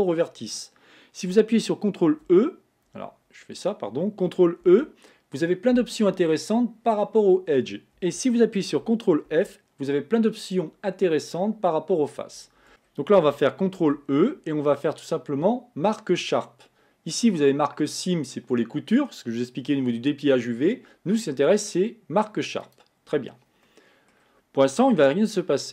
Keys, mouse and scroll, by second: 4.7 ctrl+e, 9.3 ctrl+f, 12.7-13.9 middle drag, 13.9 ctrl+e, 23.8-25.0 middle drag, 25.0 Tab.